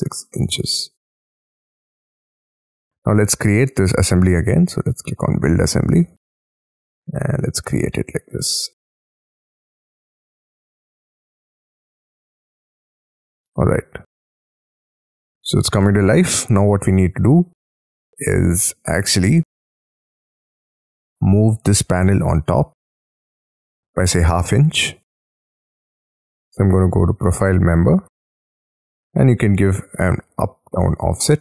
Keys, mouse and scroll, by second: 0.0-0.9 typing, 1.3 Tab, 1.7 middle click, 2.4 middle click, 2.7-7.8 scroll down 4, 10.9 middle click, 11.5 space, 11.8-13.0 scroll up 15, 13.0 middle click, 14.5-15.1 scroll down 11, 15.1-15.8 scroll up 10, 15.8 middle click, 16.6 scroll down 6, 16.9-17.3 scroll up 6, 17.3-18.2 scroll down 18, 18.2-18.9 scroll up 14, 18.9 scroll down 1, 19.4-19.9 scroll down 3, 19.9-20.6 scroll up 4, 20.6 middle click, 23.2 middle click, 23.6-24.4 scroll up 9, 24.4-29.7 scroll down 6, 30.6-31.4 typing.